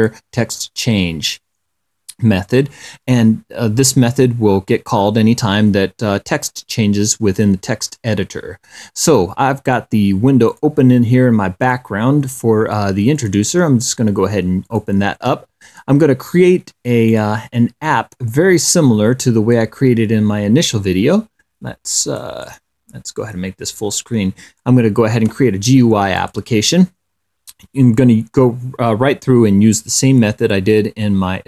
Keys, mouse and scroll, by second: 1.5 click, 10.8 click, 11.9 click, 13.5 click, 15.0 click, 17.4 click, 18.6-20.1 drag, 22.5 click, 26.5 click.